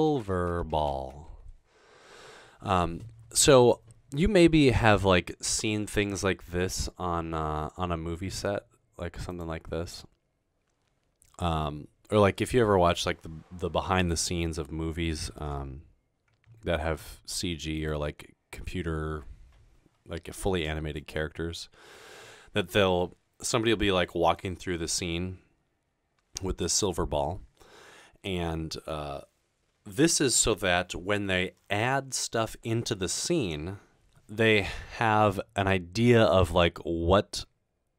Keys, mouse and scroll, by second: 0.0-2.7 typing.